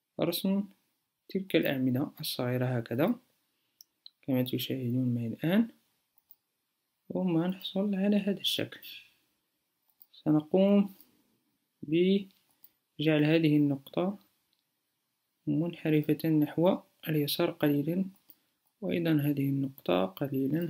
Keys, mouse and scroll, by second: 11.1 a.